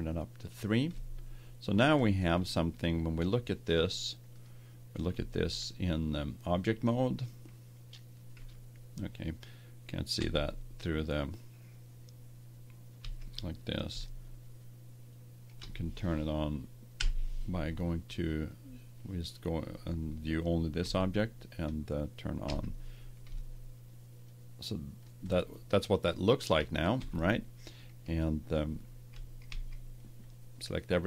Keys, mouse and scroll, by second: 0.9 middle click, 4.3-6.1 drag, 5.1 Tab, 8.4 z, 10.1 Tab, 13.0 z, 14.1-15.8 middle drag, 15.9 middle click, 16.9 KP_Divide, 17.9 middle click, 20.7 Tab, 22.4 z, 26.9 Tab, 29.0 a, 29.4 a.